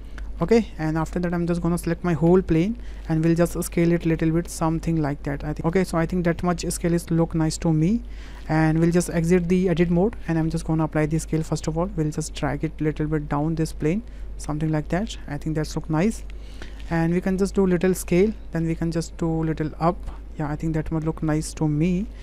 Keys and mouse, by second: 0.8 shift+middle click, 1.3 middle click, 2.3 a, 3.3 click, 3.5 click, 4.5 click, 5.5 middle click, 7.8 middle click, 8.8 Tab, 10.3 ctrl+a, 11.5 click, 12.6-14.7 drag, 14.9-15.9 middle drag, 16.2-16.8 middle drag, 17.3 s, 18.8-19.9 drag, 20.1-21.9 middle drag.